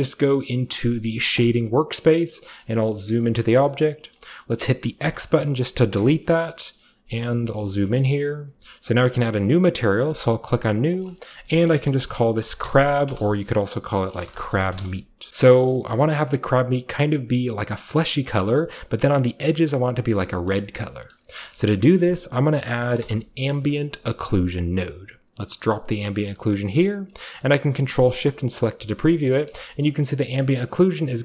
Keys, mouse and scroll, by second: 1.4 click, 2.8-5.0 shift+scroll up 1, 2.9 shift+middle drag, 3.1-3.5 shift+middle drag, 3.7 shift+middle click, 4.2 shift+middle click, 5.0-6.7 drag, 6.2 KP_5, 6.7 ., 7.5-9.3 shift+scroll up 1, 7.5-7.9 shift+middle drag, 8.0-10.0 shift+middle drag, 9.3-10.0 shift+scroll up 1, 10.1 drag, 10.9 click, 12.4 shift+click, 12.4-13.1 typing, 14.2-15.8 typing, 15.3-17.9 middle drag, 18.6 middle click, 19.0-20.0 middle drag, 20.1 middle click, 20.5 middle click, 21.1-23.0 middle drag, 21.9 shift+click, 23.0 typing, 24.6-25.3 typing, 24.8 click, 25.9 click, 26.2-27.3 middle drag, 27.9 ctrl+shift+click, 28.7 middle drag, 29.1 shift+middle drag, 29.4 typing, 29.6-30.7 shift+scroll up 2, 29.7 shift+middle drag, 30.0-31.2 shift+middle drag, 30.7-31.2 shift+scroll up 1.